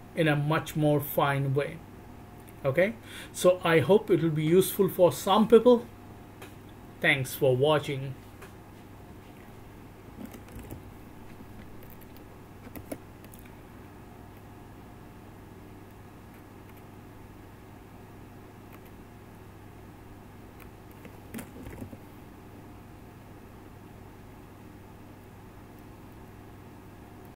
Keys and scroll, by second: 12.2 Right, 12.8 Return, 23.2 Right, 23.6 Right, 24.2 Right, 24.4 Right, 25.0 Right, 25.2 Right, 25.8 Right, 26.3 Right.